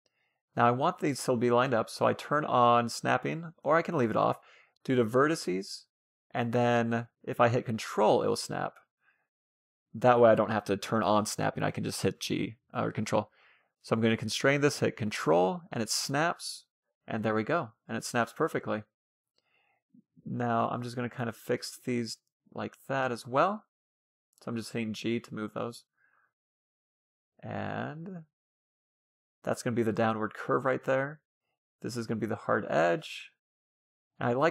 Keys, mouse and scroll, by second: 2.2-5.4 drag, 5.6 g, 8.9 ctrl+z, 9.7-12.5 middle drag, 11.3 g, 16.2-17.2 scroll up 1, 17.2-19.8 middle drag, 18.8-21.7 right drag, 19.0 g, 20.3 g, 22.2-26.1 right drag, 22.3 g, 23.4 g, 24.7 g, 25.7 a, 26.2-29.0 middle drag, 29.2-29.7 scroll up 1, 29.7-30.7 scroll down 1, 30.7 scroll down 1, 32.3-33.2 scroll up 1, 33.2-33.6 scroll down 1, 33.6-34.5 middle drag.